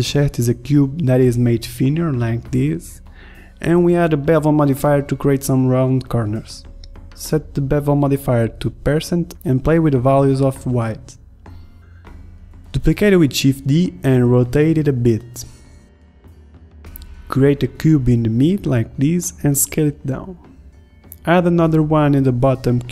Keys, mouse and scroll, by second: 0.0 shift+s, 0.5 ctrl+Tab, 0.9 ctrl+Tab, 1.4 shift+s, 1.5 Tab, 1.6 shift+a, 2.0 s, 2.8 s, 4.1 r, 5.9 Tab, 6.7 click, 8.2-9.4 drag, 9.5 drag, 10.4 s, 11.1 click, 12.1 middle drag, 12.4 click, 13.0 middle drag, 13.9 middle click, 14.1 click, 14.5 shift+d, 16.1-17.8 typing, 16.2 ctrl+z, 16.6 Tab, 19.2 s, 19.8 s, 20.9 r, 21.8 click, 22.6 s.